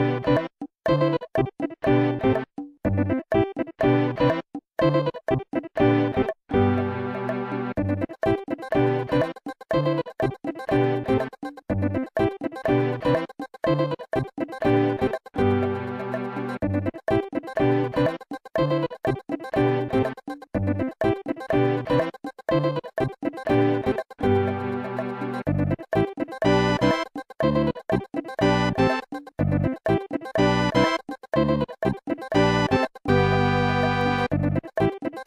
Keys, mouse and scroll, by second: 0.3-1.0 typing, 1.4 ctrl+z, 4.9 right click, 6.1 scroll up 2, 8.0 right click, 10.4 ctrl+z, 11.1 ctrl+z, 12.9 right click, 17.7 i, 19.1-19.5 typing, 20.3 Return, 21.9-22.5 typing, 23.9 Return, 25.4 click, 27.7 w, 28.4 click, 29.1 click.